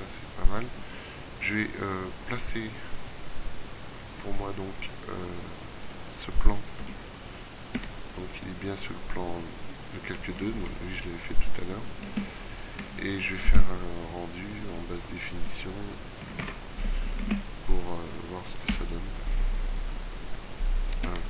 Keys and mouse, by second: 5.4 right click, 6.3 m, 10.3 middle click, 12.1 ctrl+w, 12.9 z, 13.5 ctrl+w, 17.3 ctrl+w.